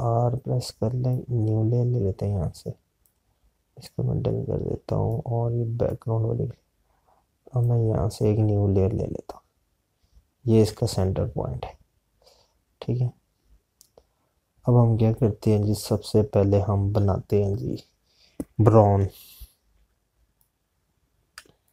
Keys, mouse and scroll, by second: 2.3 click, 13.0 scroll down 1, 14.0-14.4 scroll up 1, 14.9 scroll down 1, 16.2 scroll up 1, 16.6 scroll down 1, 16.9 scroll up 1, 17.3 scroll, 19.9 scroll up 1, 20.6 z, 21.3 click.